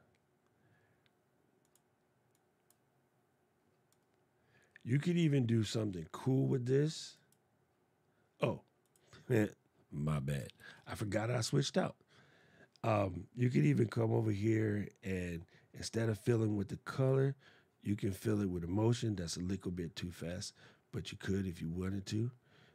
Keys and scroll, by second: 10.3 shift+super+d.